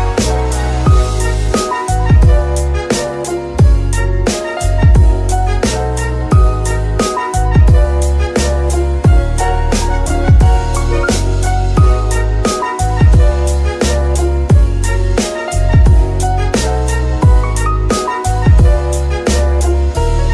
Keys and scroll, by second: 1.6 KP_Decimal, 12.4 ctrl+shift+z, 18.8 z.